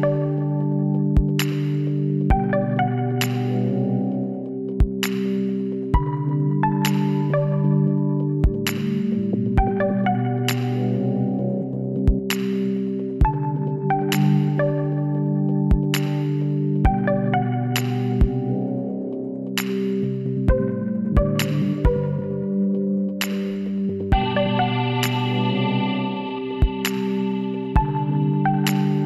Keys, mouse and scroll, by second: 2.0-5.5 middle drag, 8.1 KP_7, 9.6 middle click, 13.8 b, 16.3 middle click, 17.4-18.7 middle drag, 18.9-22.6 middle drag, 22.6 b, 25.1 b, 27.9 b.